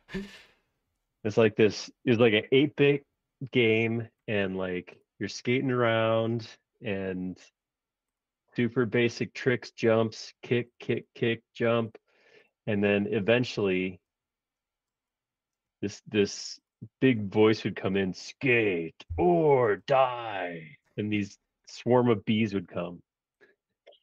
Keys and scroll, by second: 10.6 space, 16.3 space, 17.4 s, 18.9-19.8 typing.